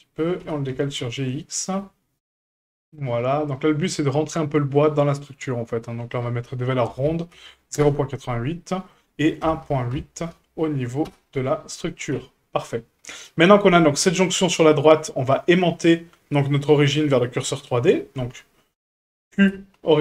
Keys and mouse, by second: 0.4 g, 3.8 shift+middle click, 6.3-8.5 drag, 7.4 KP_8, 8.8-11.8 drag, 12.1 a, 13.2-14.1 right drag, 14.1 shift+middle drag, 19.3 q.